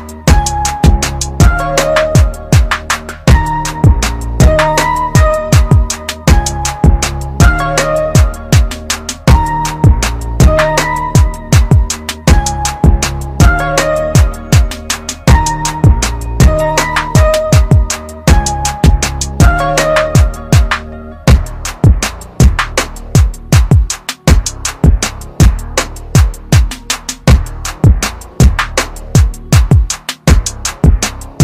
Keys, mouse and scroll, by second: 14.1-15.0 scroll down 1, 15.0 click.